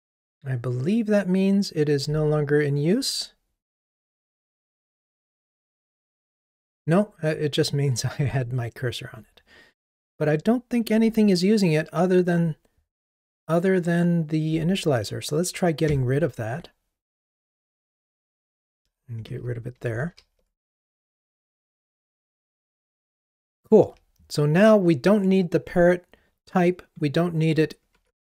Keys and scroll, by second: 2.6 super+b, 10.5 super+b, 15.9 super+BackSpace, 20.2 ctrl+r.